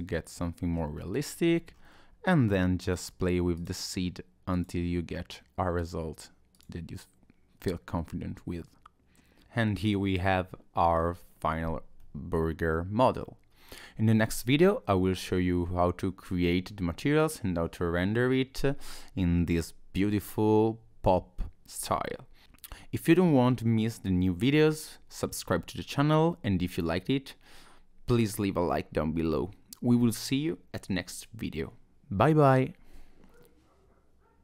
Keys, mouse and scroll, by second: 1.2-2.4 scroll up 4, 2.9 click, 3.5 click, 4.5 click, 5.8 click, 6.5 click, 7.6 middle click.